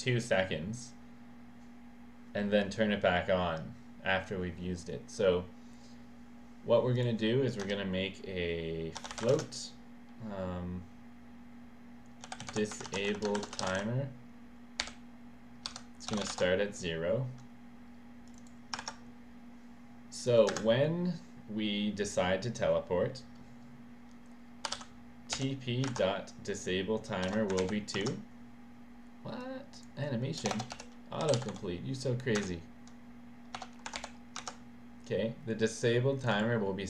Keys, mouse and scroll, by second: 6.9 click, 7.7 Return, 8.7-9.7 typing, 12.0-14.8 typing, 15.7 Left, 15.8-16.7 typing, 18.3 click, 20.2 click, 20.6 Return, 24.4-25.4 typing, 27.0-28.1 typing, 29.4 click, 30.4 BackSpace, 30.6 BackSpace, 30.7 ., 31.2 d, 32.4 Return, 33.3-34.5 typing, 36.2 click.